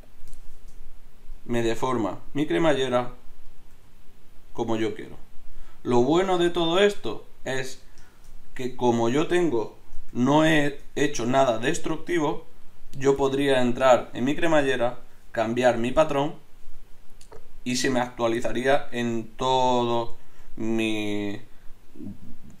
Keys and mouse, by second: 1.5 g, 3.8 g, 6.2 g, 10.0 Tab, 12.5 right click, 14.6 Tab, 16.6 Tab, 20.5-22.6 middle drag.